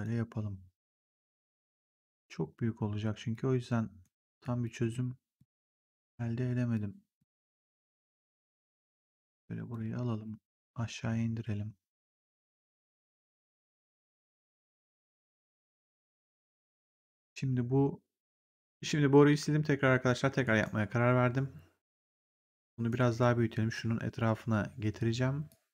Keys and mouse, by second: 0.7 click, 1.0 r, 1.7 click, 3.9 right click, 4.3 click, 4.7 w, 5.3 click, 7.0 right click, 8.4 right click, 8.8 click, 10.5 click, 16.2 click, 18.5 click, 20.4 right click, 22.6 right click, 23.7 r, 25.4 click.